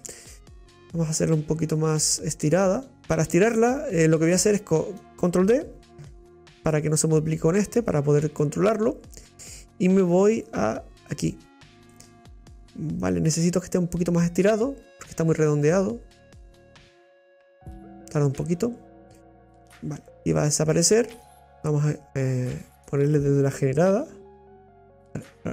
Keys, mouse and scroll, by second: 2.1 middle click, 3.0 click, 6.1 shift+d, 8.1-8.6 scroll up 7, 12.0-18.2 drag, 19.1-21.4 middle drag.